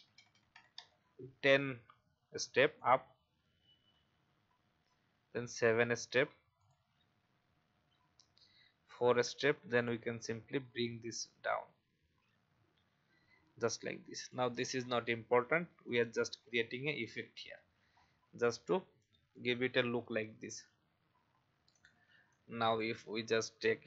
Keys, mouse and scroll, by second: 0.1 Up, 0.3 Up, 0.5 Up, 0.7 Up, 2.7 click, 3.5 Up, 3.8 Up, 4.0 Up, 4.1 Up, 4.5 typing, 6.6 click, 7.2-7.6 typing, 9.7 click, 11.7 Down, 12.0 Down, 12.1 Down, 14.2 click, 16.4-17.0 alt+scroll down 1, 17.0 click, 17.9-19.3 alt+scroll up 1, 19.3 click, 19.9-20.4 alt+scroll down 1, 20.4-23.8 drag.